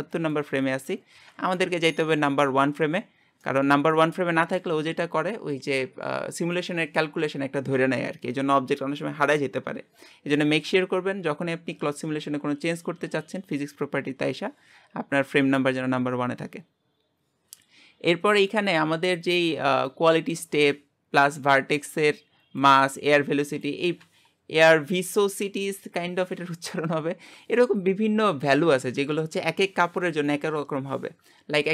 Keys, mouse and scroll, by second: 2.0 scroll up 1, 2.2-3.5 drag, 3.5-31.7 middle drag.